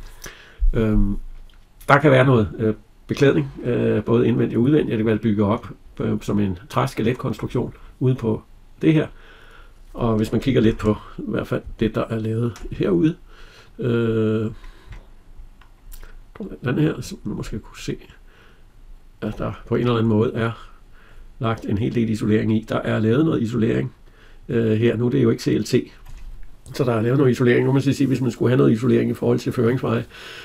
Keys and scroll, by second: 10.5 alt+Tab.